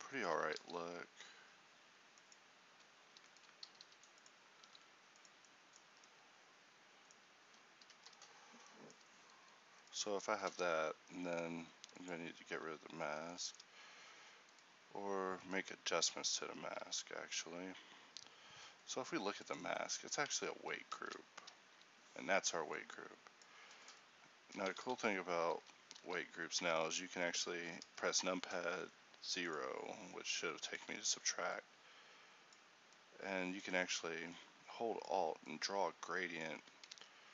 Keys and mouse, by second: 0.7 alt+s, 3.7 g, 4.7 alt+s, 6.0 Tab, 7.5 a, 12.6 a, 16.5 Tab, 16.9 z, 20.5 Tab, 21.1 ctrl+t, 24.6 click, 24.9 ctrl+a, 25.7 ctrl+z, 27.9 0, 29.6-31.3 drag, 33.1-37.1 drag, 37.1 Tab.